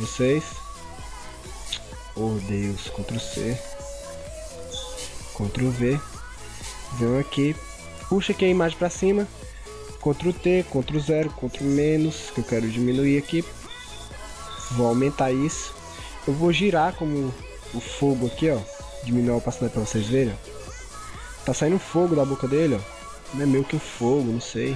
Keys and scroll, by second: 3.0 ctrl+c, 5.4 ctrl+v, 10.2 ctrl+t, 10.9 ctrl+0, 11.5 ctrl+-, 21.8 ctrl+=, 22.6 ctrl+0.